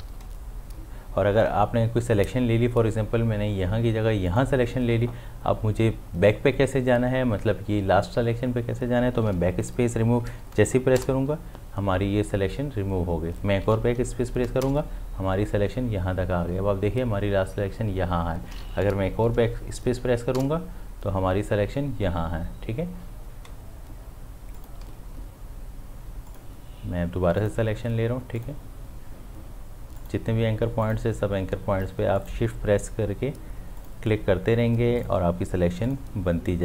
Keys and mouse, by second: 4.3 click, 23.5 shift+Num_Lock, 24.6 click, 26.3 shift+click.